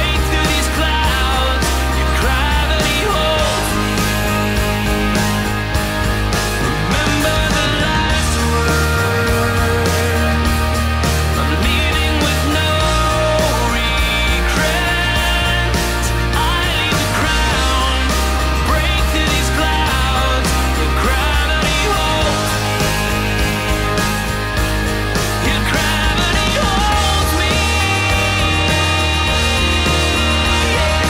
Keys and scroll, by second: 1.1 super+z, 1.4 super+z, 6.1 super+z, 8.2 super+z, 14.7 super+z, 24.1 super+z, 24.5 super+z, 28.2 super+z, 29.3 super+z, 29.8 super+z.